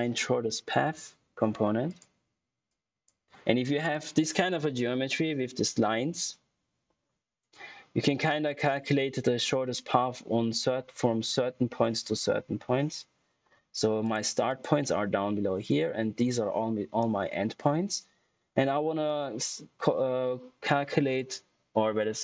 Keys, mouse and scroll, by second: 0.0-0.6 typing, 0.7 Return, 1.8 click, 3.7 typing, 13.9 click, 13.9 typing.